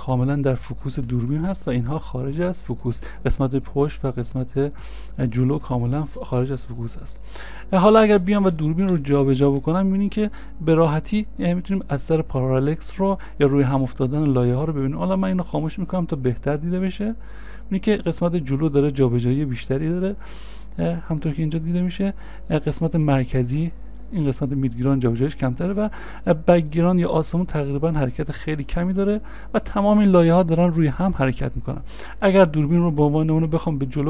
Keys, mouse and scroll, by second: 6.4 scroll down 1, 6.5 scroll up 1, 8.2-11.8 scroll, 11.8 c, 13.0 c, 13.0 ctrl+z.